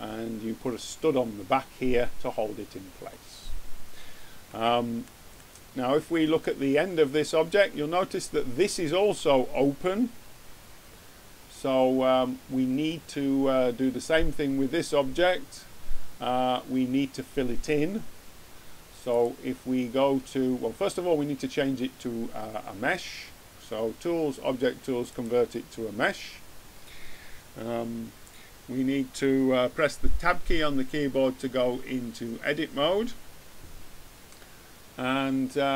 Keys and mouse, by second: 19.1-20.8 middle drag, 30.4 Tab.